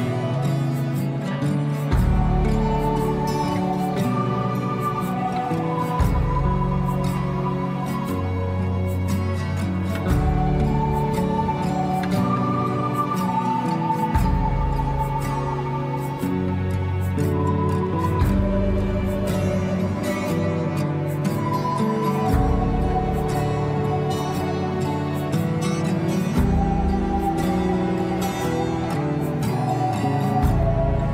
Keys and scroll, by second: 7.9 ctrl+z, 18.3 F4, 30.3 F4.